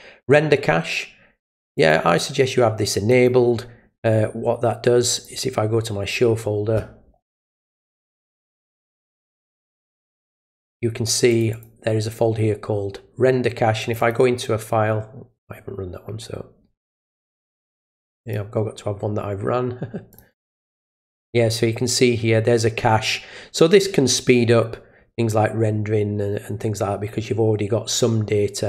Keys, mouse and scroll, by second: 1.8 click, 3.1 click, 5.2 click, 8.0 click, 9.6 click, 11.3 click, 11.5 click, 13.8 click, 14.0 click, 15.4 click, 17.1 click, 17.3 click, 18.2 click, 20.1 click, 20.3 click.